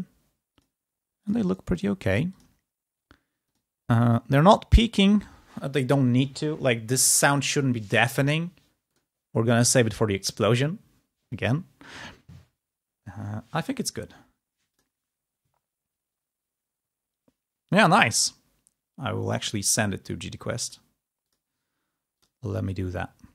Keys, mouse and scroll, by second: 0.4 click, 1.1 click, 2.2 click, 3.3 click, 8.7 click, 14.7 click, 19.7 click, 20.4 click, 21.1 click.